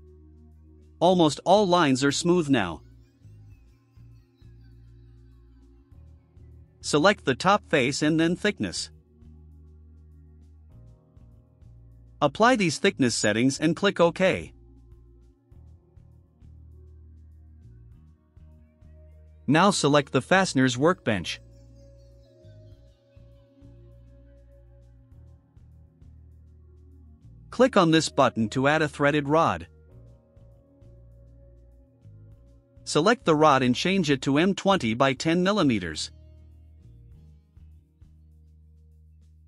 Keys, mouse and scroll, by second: 0.2-1.7 drag, 1.9 scroll down 1, 2.3-2.7 right drag, 5.1-5.7 drag, 5.9-6.3 scroll up 2, 6.9 click, 10.2 click, 13.5 click, 14.3 click, 17.1 click, 20.3-20.7 scroll down 4, 22.3 click, 25.1 click, 29.8 click, 33.6 click, 33.7 click, 35.8 click, 36.2 click, 37.6 click, 39.1 click.